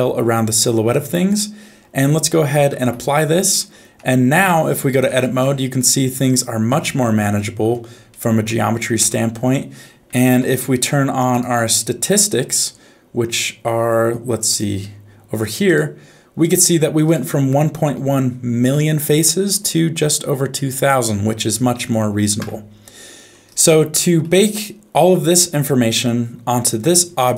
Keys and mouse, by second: 2.8 ctrl+a, 3.6 middle click, 4.0 Tab, 4.5 middle click, 4.9 2, 5.4 middle click, 6.6 middle click, 8.1 shift+middle click, 9.0 Tab, 10.5 ctrl+s, 11.3-13.9 drag, 14.5-16.4 drag, 17.0 click, 17.9 Tab, 18.6 a, 19.1 middle click, 22.4 Tab, 23.7 shift+middle click.